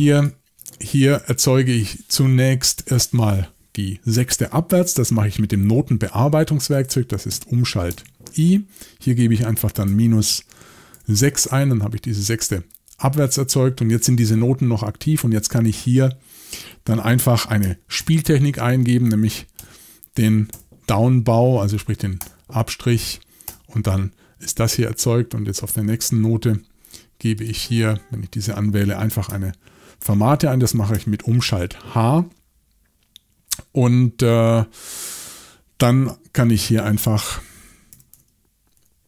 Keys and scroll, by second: 7.9 shift+|, 9.9 -, 10.9 6, 11.4 Return, 18.0 shift+p, 19.2-20.5 typing, 22.2 Return, 31.4 shift+h, 37.1-39.0 typing.